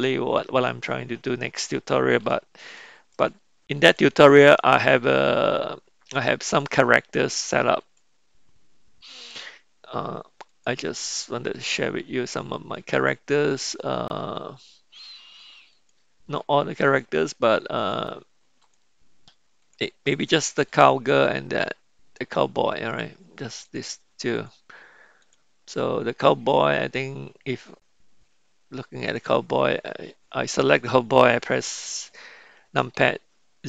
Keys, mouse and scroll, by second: 0.0 click, 2.2 n, 3.2-5.3 middle drag, 8.8 click, 10.5 click, 15.8 click, 17.0 click, 17.8 click, 18.7 click, 19.7 click, 20.4 click, 20.8 click, 23.8 click, 24.4 drag, 25.2 click, 29.0 click, 32.8 KP_Decimal.